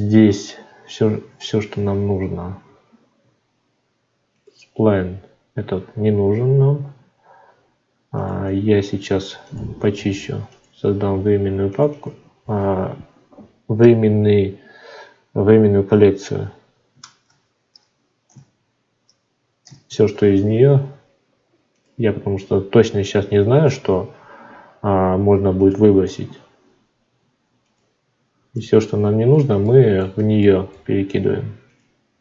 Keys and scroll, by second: 16.9 shift+t, 17.2 e, 19.6 Return.